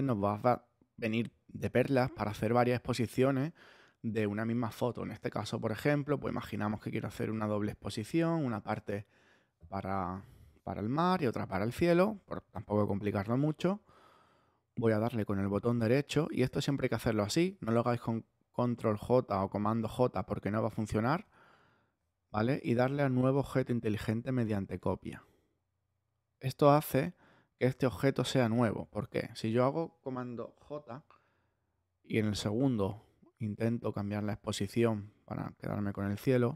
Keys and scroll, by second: 28.9 super+z, 30.6 super+j.